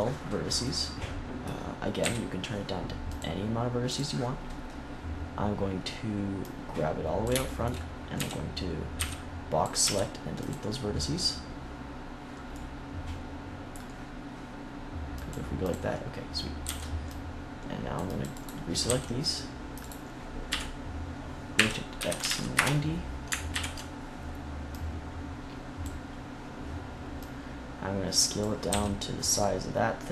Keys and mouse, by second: 1.9 KP_7, 6.4-8.1 drag, 8.1 a, 8.9 b, 9.7 x, 15.0-17.5 drag, 16.5 c, 18.4 click, 18.8 c, 20.4 KP_3, 21.5 r, 23.4 ctrl+KP_1, 24.7-26.7 drag, 27.1-28.6 drag, 28.6 s.